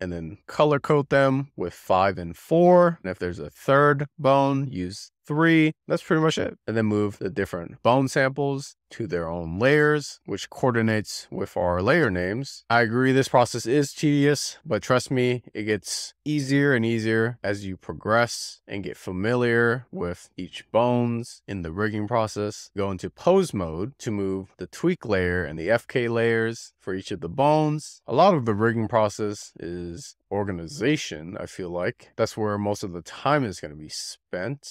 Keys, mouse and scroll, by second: 1.5 click, 3.4 click, 4.1-5.5 drag, 5.8 click, 7.4 scroll up 4, 7.7 click, 7.9 shift+click, 8.7 m, 9.3 click, 9.7 scroll down 1, 9.9 shift+middle click, 10.1 shift+click, 10.5 m, 11.0 click, 11.5 shift+middle click, 12.2 shift+click, 13.6 m, 14.8 click, 15.4 scroll down 2, 15.6 click, 15.8 m, 18.2 click, 19.3 m, 20.0 click, 20.6 a, 20.9 scroll down 16, 21.4 click, 21.6-22.4 scroll up 26, 22.5 scroll down 4, 24.7-26.7 drag, 26.7-28.3 scroll down 24, 28.3 click, 28.8 scroll up 1, 29.0 click, 29.3 w, 29.5 click, 29.7 scroll down 4, 30.0 click, 30.8 scroll down 1, 31.1 drag, 32.3 scroll down 1, 32.6 scroll up 1, 32.7 click, 33.0 scroll down 4, 33.3 click, 33.4 click, 33.6 click, 33.9 click, 34.1 click, 34.5 click.